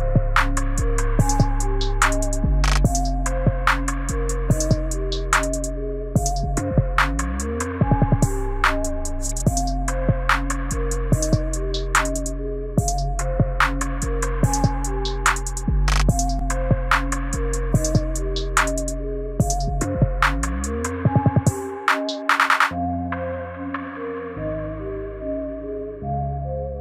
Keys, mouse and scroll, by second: 0.8 click, 4.5 click, 15.0 click, 16.5-17.3 scroll down 1, 17.3-17.9 scroll down 5, 17.9 shift+middle click, 20.1 click, 25.9 click.